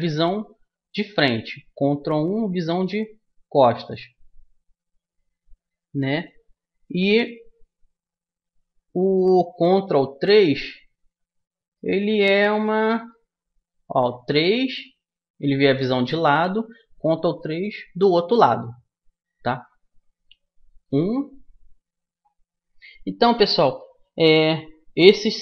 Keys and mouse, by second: 11.6-13.8 middle drag, 13.8 KP_3, 20.8 KP_1, 24.8-25.4 middle drag.